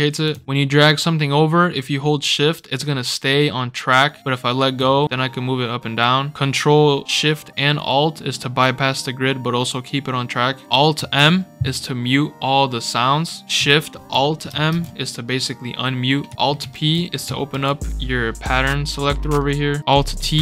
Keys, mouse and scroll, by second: 0.4-2.9 shift+drag, 4.7 shift+click, 5.5-7.9 drag, 9.4-10.7 alt+shift+drag, 10.9 alt+m, 14.5 alt+shift+m, 16.3-16.6 scroll up 5, 16.7 alt+p, 17.5 alt+p, 18.7 scroll down 2, 20.2 alt+t.